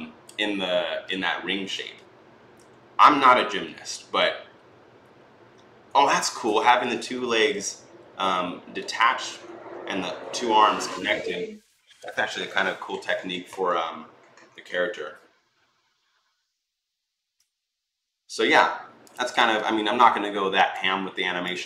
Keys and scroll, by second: 19.3 Escape.